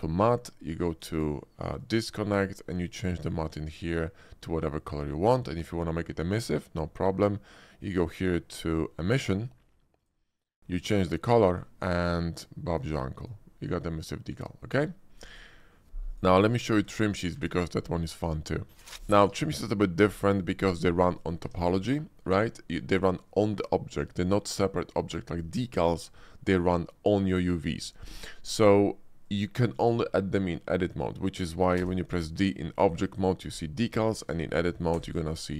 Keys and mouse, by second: 2.9 click, 10.0 click, 10.7 click, 12.9 click, 15.0 x, 16.0 click, 16.6 x, 19.1 Tab, 19.9 ctrl+b, 21.4 Tab, 25.6-28.9 drag, 29.2 click, 31.8 d, 34.2 Tab, 35.0 d.